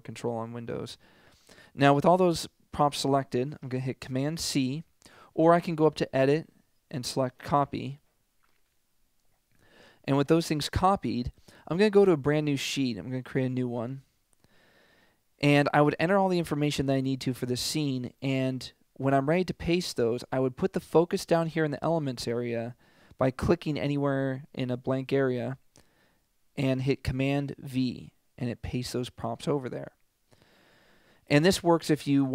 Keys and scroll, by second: 4.6 super+c, 27.6 super+v.